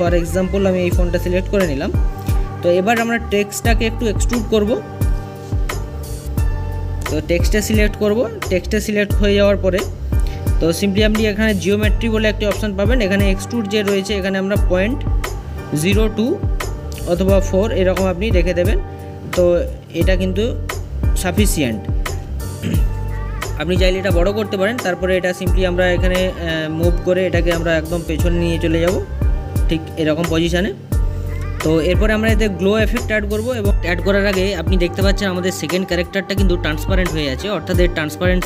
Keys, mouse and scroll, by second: 1.7 click, 2.7-5.7 middle drag, 7.1 click, 7.4-13.1 middle drag, 13.4 middle click, 14.4-16.6 drag, 19.8 click, 20.1-23.2 middle drag, 24.2-26.1 middle drag, 26.1-28.9 drag, 29.8 scroll up 5, 29.9-31.0 middle drag, 31.1-32.0 scroll down 2, 32.0 middle click, 34.5 click, 34.7 scroll down 4, 35.1-36.8 middle drag, 36.8 scroll up 4, 37.6-38.4 drag.